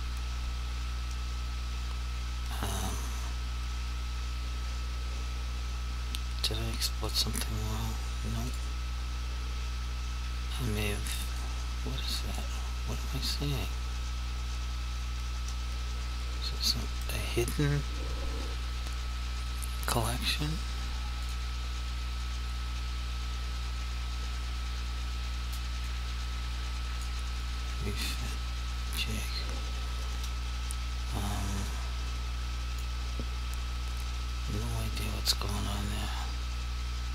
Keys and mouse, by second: 7.1 click, 11.5 click, 20.1 click, 26.0 click, 31.8 click.